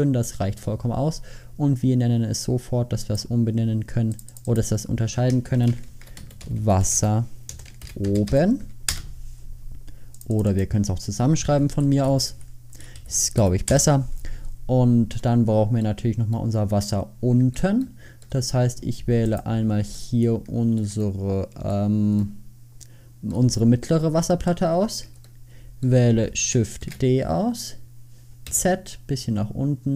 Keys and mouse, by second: 6.7 s, 16.1 middle click, 16.3 middle click, 20.3 click, 20.4 middle click, 20.6 middle click, 26.9 shift+d.